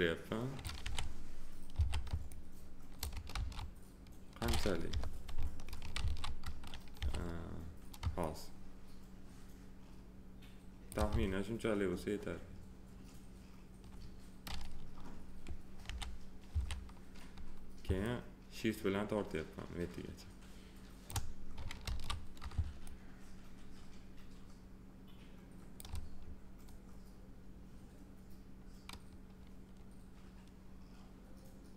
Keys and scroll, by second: 0.8 f, 3.3 ctrl+z, 4.9 p, 6.0 ctrl+z, 7.0 r, 15.8 f, 21.8 ctrl+z.